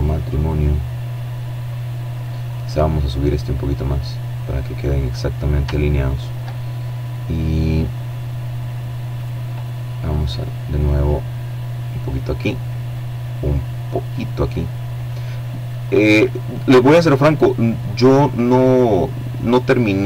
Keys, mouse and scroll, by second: 1.8-3.6 drag, 3.6-4.3 scroll up 1, 7.6 right click, 9.5-10.8 drag, 13.5-14.6 drag, 15.7-17.8 drag, 18.2-18.9 scroll up 1, 19.3 shift+right click.